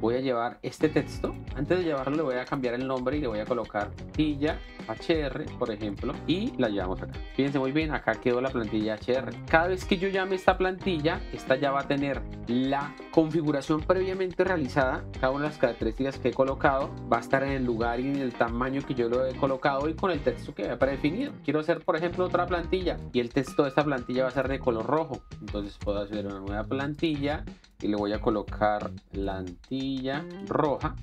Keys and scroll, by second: 3.7-5.7 typing, 9.4 ctrl+x, 28.7-31.0 typing.